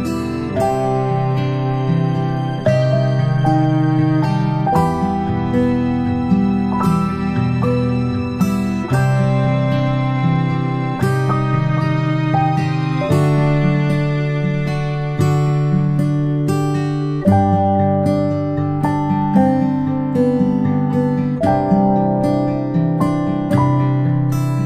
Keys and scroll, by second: 6.4 space, 12.0 space, 13.6 ctrl+z, 23.1 ctrl+space, 23.3-24.6 ctrl+space.